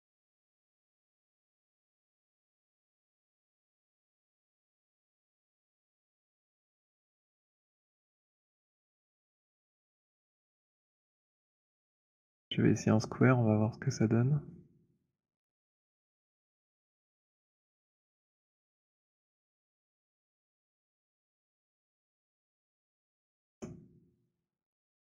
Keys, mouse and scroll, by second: 0.5 middle click, 0.7 middle click, 1.8 alt+middle click, 2.0 click, 8.5 alt+click, 10.6 alt+click, 11.1 alt+click, 12.0 alt+middle click, 18.5 click, 20.2 click, 22.7 alt+click, 23.4 alt+click.